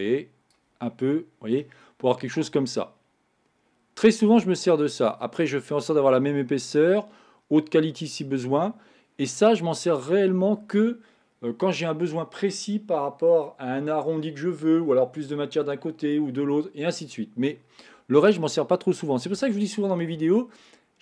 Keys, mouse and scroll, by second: 0.9-2.8 middle drag, 2.8-5.6 drag.